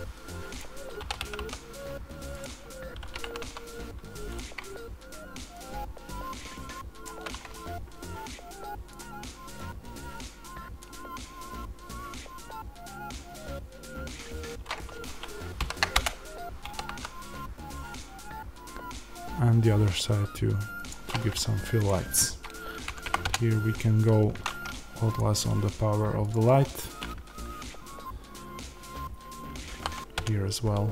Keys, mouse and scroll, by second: 0.5 r, 0.5 click, 0.9 r, 2.3 click, 3.0 g, 4.3 click, 5.6-7.0 drag, 16.0 Return, 20.8 click, 23.2 KP_Enter, 23.2-25.1 drag, 30.1-30.9 drag, 30.2 KP_Enter.